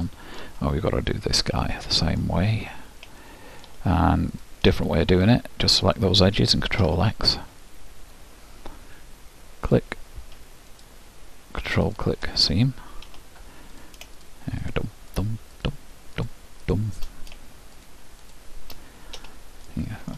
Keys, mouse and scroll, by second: 0.2-5.1 middle drag, 4.5-7.9 drag, 7.0 ctrl+x, 9.8-13.8 drag, 13.9-20.1 drag, 19.8-20.1 middle drag.